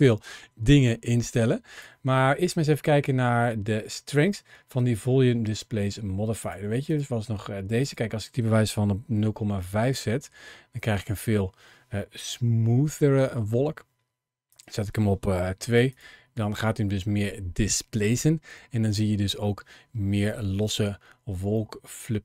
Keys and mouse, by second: 1.2 click, 6.2 click, 6.7 click, 7.6-9.6 drag, 12.1 shift+middle click, 14.3-15.9 drag, 21.4-22.2 middle drag.